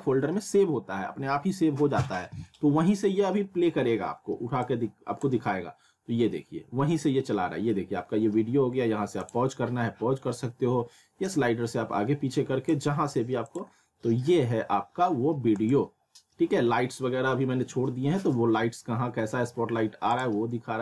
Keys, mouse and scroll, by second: 4.6-6.4 drag, 14.9 click, 20.1 click.